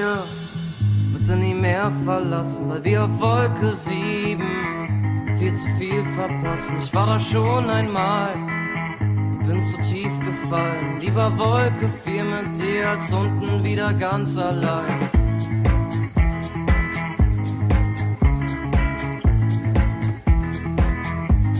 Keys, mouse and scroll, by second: 5.3-6.5 drag, 9.4 middle click, 10.9 middle click, 11.1 middle click, 18.1 middle click, 18.4 middle click, 19.6 Tab.